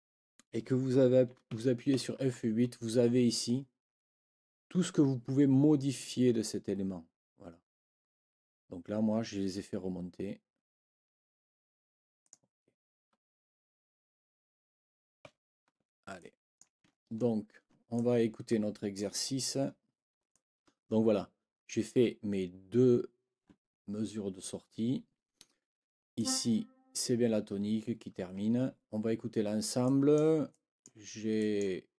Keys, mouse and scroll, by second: 1.5 F8, 12.2 click, 15.2 F8, 16.2 click, 17.1 ctrl+scroll down 2, 18.0-19.2 ctrl+drag, 19.7 ctrl+scroll down 2, 20.3 ctrl+click, 26.2 click, 28.8 ctrl+scroll down 2, 29.8 ctrl+click, 30.5 click, 31.4 click.